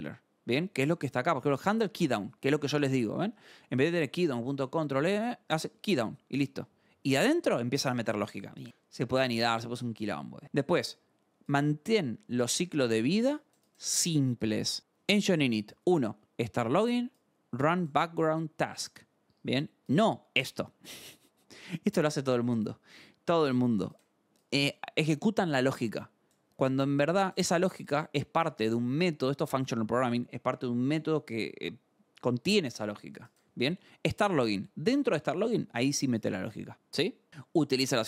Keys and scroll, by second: 2.6 scroll, 7.0 scroll, 11.2 scroll, 19.2 scroll, 37.3-38.0 scroll.